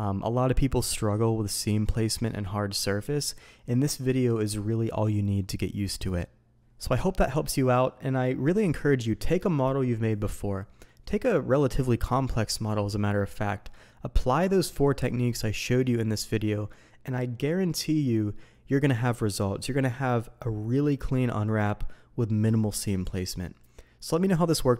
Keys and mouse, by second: 6.9-7.7 drag.